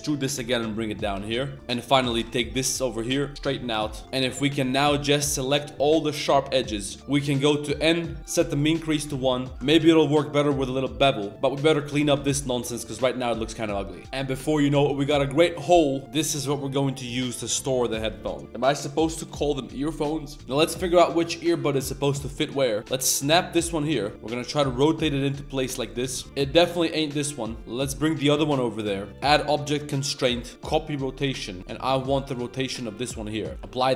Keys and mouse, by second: 1.1-2.0 typing, 1.4 shift+click, 3.3 s, 3.7 Tab, 3.9 click, 4.0 a, 4.4 alt+shift+click, 5.0 alt+shift+click, 5.7 alt+shift+click, 7.0 n, 8.2 click, 8.9 middle drag, 9.1 ctrl+e, 9.5 z, 9.5 g, 9.7 ctrl+b, 11.3 Tab, 11.3 KP_7, 11.3 1, 11.3 z, 11.8 z, 13.4 z, 13.5 click, 13.9 click, 14.0 Tab, 14.0 middle click, 14.0 2, 14.3 middle drag, 14.8-15.2 middle drag, 15.5 middle click, 15.9 middle drag, 16.4 middle click, 16.6 g, 20.4 Tab, 20.4 shift+s, 20.4 middle drag, 20.8 middle click, 21.1 click, 21.4 g, 22.0 middle click, 22.5 middle drag, 22.8 shift+s, 23.9 shift+drag, 24.1 KP_1, 24.6 r, 26.0 z, 26.2 middle click, 26.2 r, 27.6 Tab, 27.6 ctrl+alt+shift+c, 27.6 shift+s, 27.8 click, 28.5-28.8 middle drag, 29.3-30.7 drag, 32.9-33.5 middle drag, 33.6 ctrl+a, 33.9 middle click.